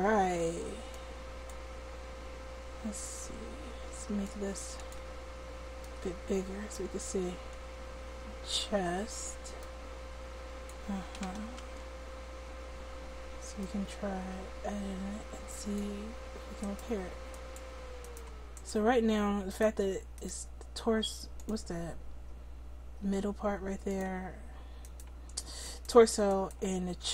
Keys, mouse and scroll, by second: 11.7 ctrl+z, 17.3-21.4 right drag, 24.8-26.3 middle drag, 26.3-27.1 right drag.